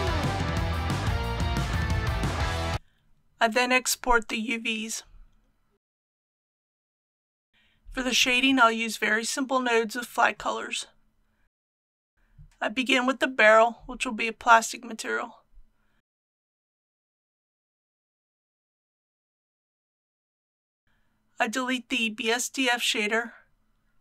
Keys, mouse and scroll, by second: 0.0-2.2 typing, 0.0 click, 0.6 click, 1.1 ctrl+z, 1.3 click, 2.0 click, 2.5-3.9 drag, 7.5 scroll down 1, 7.7 click, 9.0 shift+middle click, 11.0 click, 19.4-20.2 typing, 20.5 Return, 22.2 click, 23.3 Delete.